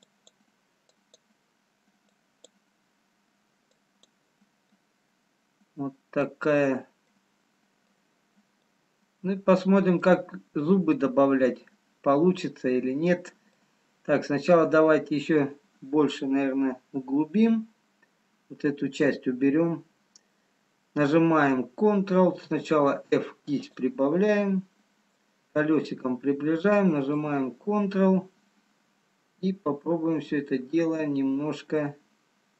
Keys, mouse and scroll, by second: 1.0 click, 4.7 click, 4.7 middle click, 7.0 middle click, 7.0-7.8 scroll up 2, 8.6-9.9 scroll up 1, 10.3 middle click, 12.0 middle click, 12.0 scroll up 1, 13.5 scroll down 1, 14.9 middle click, 14.9 scroll down 1, 24.9 scroll up 2, 24.9 f, 26.0 middle click, 27.5 ctrl+click.